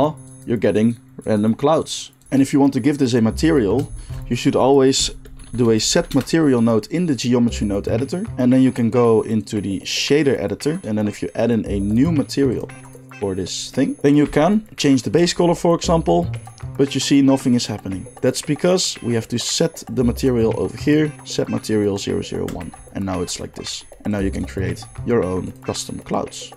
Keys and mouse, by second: 2.2-3.8 middle drag, 4.0 shift+a, 9.5-12.0 drag, 12.5-13.9 drag, 14.2-20.9 middle drag, 20.9-24.2 drag, 24.2 middle click, 24.4 click, 24.6 middle click, 25.4 click, 25.6-26.5 middle drag.